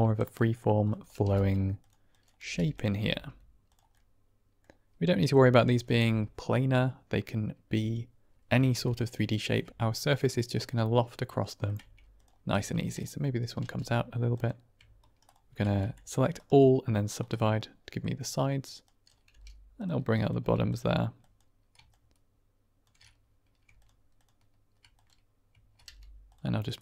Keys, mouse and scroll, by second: 0.3 click, 1.1 g, 1.7 click, 2.0 click, 2.3 g, 2.6 click, 2.9 r, 3.0 r, 3.6 click, 3.8 middle click, 5.0 middle click, 8.6 middle click, 11.2 middle click, 11.7 Tab, 12.1-12.4 drag, 12.4 Tab, 12.7 click, 13.5 g, 14.2 click, 14.9 shift+right click, 15.2 shift+click, 15.7 a, 16.4 right click, 17.2 middle click, 18.7 click, 19.2 g, 19.7 click, 20.1 click, 20.3 g, 20.6 click, 21.1 click, 21.9 shift+click, 25.7 g, 26.2 click, 26.5 click.